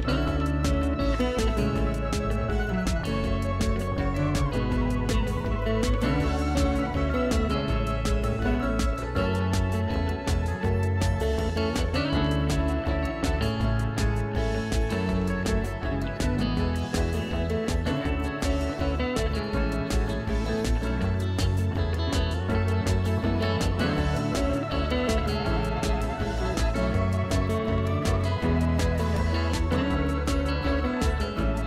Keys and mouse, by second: 7.4 right click, 7.9 click, 9.8 right click, 10.1 click, 19.4 click, 26.0 right click, 26.2 click, 30.0 ctrl+1, 30.4 click.